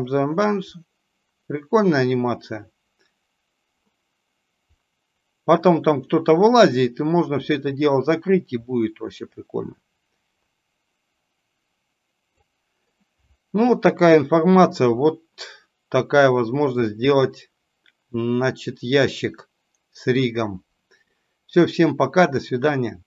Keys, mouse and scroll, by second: 16.7-20.0 middle drag.